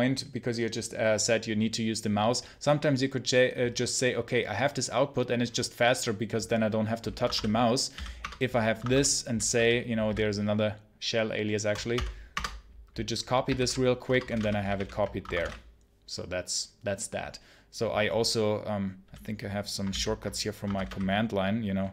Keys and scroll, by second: 7.1 Escape, 7.2-9.9 typing, 8.1 Return, 8.7 Escape, 11.8 space, 12.2 Return, 13.4 super+h, 13.9 Return, 14.2 space, 14.2 p, 14.6 super+l, 15.1 Escape, 15.2 space, 15.3 p, 19.8 ctrl+c, 20.5 Escape, 20.6 space, 20.7 p.